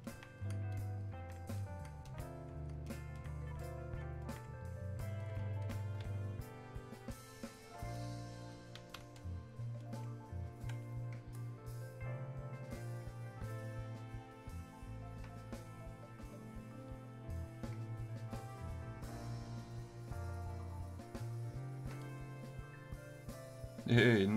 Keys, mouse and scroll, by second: 9.2-12.9 alt+drag, 14.4-24.3 drag.